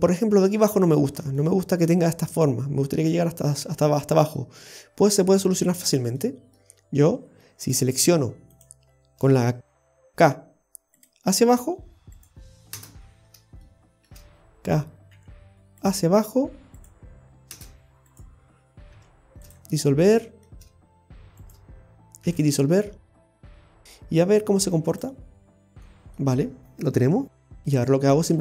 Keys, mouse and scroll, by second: 0.2 middle click, 0.8-1.2 scroll up 1, 1.4 shift+middle click, 1.6 shift+middle click, 4.2 scroll up 1, 4.7 middle click, 5.5 shift+middle click, 6.2 middle click, 6.7 scroll up 2, 7.4 scroll up 1, 7.5 shift+middle click, 8.6 click, 10.5 k, 13.2 scroll down 2, 13.6 shift+middle click, 15.1 k, 18.1 right click, 19.0 x, 19.9 scroll down 1, 20.1 shift+middle click, 21.4 right click, 22.2 x, 22.7-23.2 scroll down 3, 23.2 middle click, 25.0 click, 25.5-25.8 scroll down 1, 25.9 middle click, 28.2-28.4 scroll up 4.